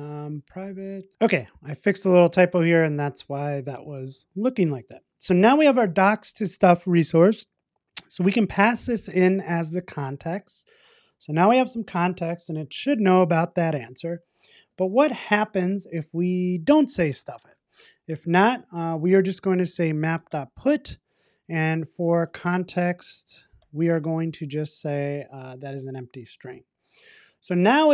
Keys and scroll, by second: 1.1 super+s, 10.2 Return, 21.2 Return.